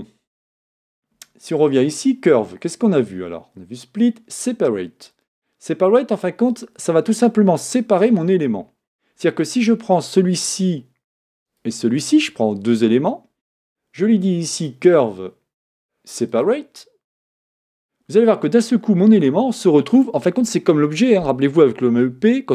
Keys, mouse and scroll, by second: 1.8-4.8 drag, 8.0 click, 11.5 shift+click, 14.6-17.6 drag, 19.2 Tab, 20.0 click.